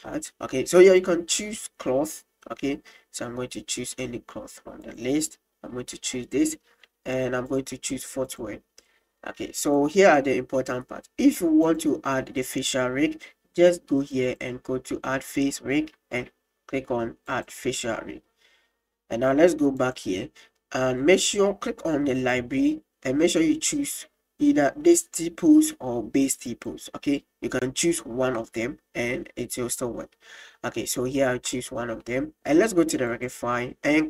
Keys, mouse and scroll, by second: 0.9-6.3 drag, 7.2 click, 7.5-8.8 drag, 9.7 click, 11.7 click, 14.3 click, 17.3 click, 19.8 click, 22.3-27.3 drag, 28.4-30.8 middle drag, 31.5-31.9 middle drag, 33.1 click.